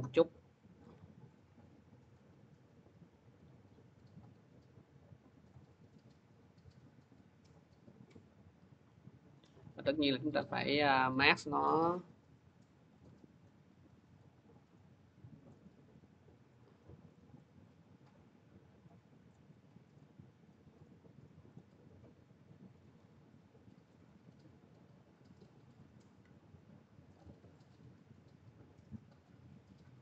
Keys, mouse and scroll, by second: 0.6 click, 1.9 click, 5.3 click, 7.0 click, 8.5 click, 10.2 click, 12.8 click, 13.3 click, 14.0 click, 14.7 click, 15.3 click, 16.2 click, 16.8 click, 17.2 click, 17.6 scroll, 19.1 click, 19.5 click, 19.8 click, 20.3 click, 21.3 click, 22.8 m, 23.8 click, 25.1 click, 25.6 click, 27.0 click, 27.4 click, 27.8 scroll, 29.0 click, 29.6 v, 29.8-30.0 scroll.